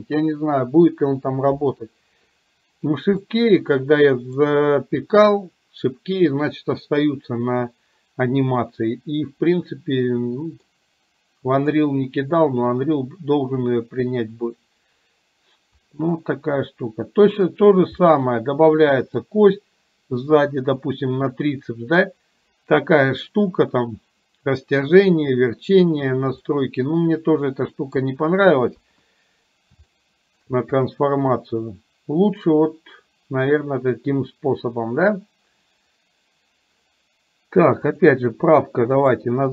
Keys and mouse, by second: 3.3-4.6 middle drag, 8.7-10.8 middle drag, 11.7 click, 13.8-15.8 drag, 16.3-17.6 middle drag, 18.1-19.3 middle drag, 26.6-28.1 middle drag, 28.8 KP_1, 30.1-30.6 shift+middle drag, 37.9-39.5 drag.